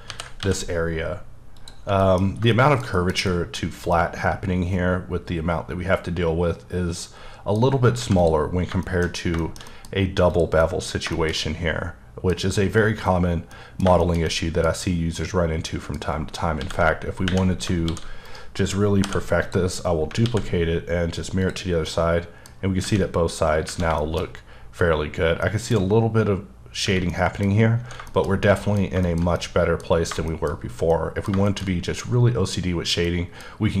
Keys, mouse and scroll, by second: 0.4 y, 1.6 click, 2.0 middle click, 2.2 scroll up 3, 2.5 middle click, 2.9 KP_Decimal, 3.3 middle click, 3.6-3.9 scroll up 1, 3.9 middle click, 7.6-8.0 scroll down 3, 8.0 x, 8.2 click, 8.4 scroll down 1, 8.8 shift+middle click, 9.1 shift+scroll down 1, 9.4 shift+middle click, 9.8 scroll down 1, 9.9-10.3 scroll up 1, 10.3 click, 10.6 middle click, 13.5 middle click, 13.8 shift+scroll down 1, 14.0 shift+middle click, 15.2 middle click, 16.6 x, 17.5-17.9 scroll down 3, 17.9 d, 18.3 right click, 19.1 h, 19.4 click, 19.7-20.2 scroll up 3, 20.2 x, 21.4 click, 21.9 middle click, 23.6 scroll up 1, 24.0 shift+middle click, 24.2-25.1 scroll up 1, 25.3 scroll up 1, 25.4 middle click, 27.1 middle click, 27.5 scroll down 2, 28.1 middle click, 28.5 double middle click, 29.0 shift+middle click.